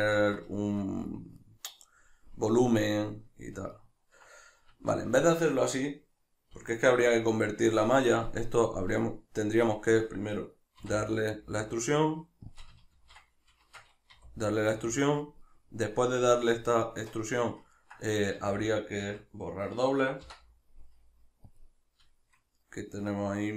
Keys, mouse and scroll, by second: 4.7 Tab, 12.6 click, 12.9 ctrl+z, 13.6 shift+Tab, 15.3 click, 15.5-23.5 middle drag, 18.4 a.